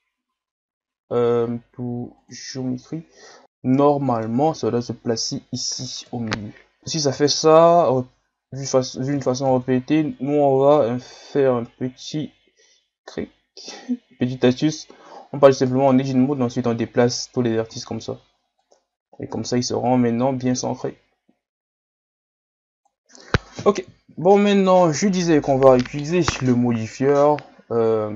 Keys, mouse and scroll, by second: 3.4-4.4 middle drag, 4.4-6.1 scroll up 2, 6.1 KP_1, 6.8 Tab, 6.9 Tab, 7.1 Tab, 9.2 Tab, 9.5 Tab, 10.6-17.6 drag, 17.6 Tab, 18.6-28.1 drag.